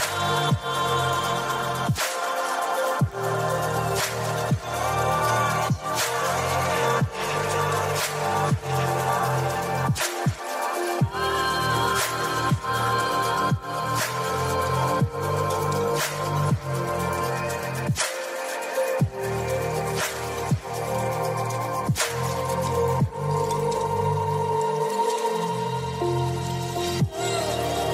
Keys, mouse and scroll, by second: 2.6 click, 3.1 ctrl+z, 3.8 ctrl+z, 5.4 ctrl+shift+z, 7.7 click, 10.0 g, 11.9 click, 12.6 click, 14.1 click, 15.8 g, 17.5 click, 18.8 click, 20.6 g, 21.5 click, 22.7 click, 25.2-26.3 drag, 27.1 g.